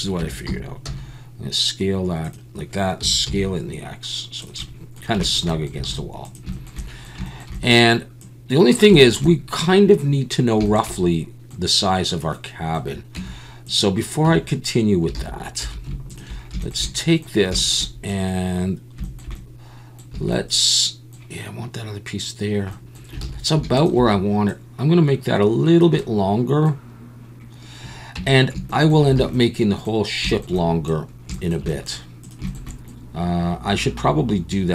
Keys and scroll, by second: 0.2 Tab, 0.5 a, 0.8 s, 3.0 s, 3.2 x, 5.9 alt+a, 13.2 Tab, 14.2 Tab, 15.1 alt+a, 15.6 2, 20.1 a, 23.2 alt+a, 28.1 Tab, 29.2 alt+a.